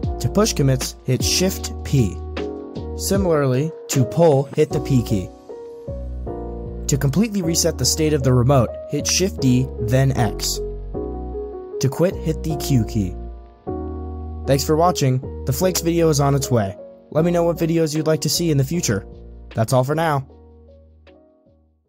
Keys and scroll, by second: 1.3 shift+p, 4.9 p, 8.9 shift+d, 12.4-13.2 typing.